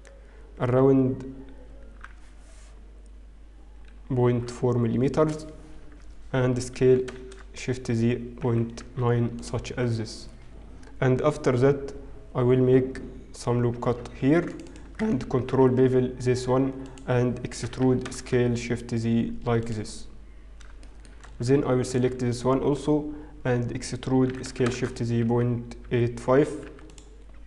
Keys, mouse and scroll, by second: 0.1 e, 7.5 s, 14.3 ctrl+r, 15.8 ctrl+b, 18.4 e, 20.9 shift+middle click, 21.9 alt+click, 22.5-23.7 scroll up 1, 24.5 e.